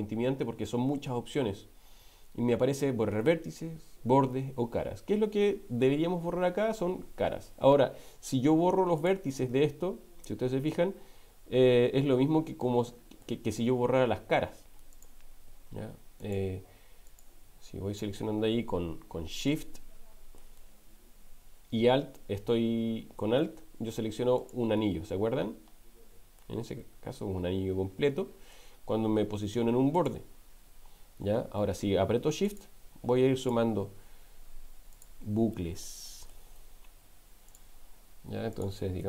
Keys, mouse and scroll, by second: 10.7-13.4 middle drag, 14.9 alt+shift+click, 16.2 alt+shift+click, 19.6 middle click, 24.4 alt+click, 26.5-28.7 middle drag, 30.0 alt+click, 32.4 alt+shift+click, 33.4 alt+shift+click, 34.9 alt+shift+click, 35.8 middle click, 37.5 alt+shift+click, 38.5 alt+shift+click.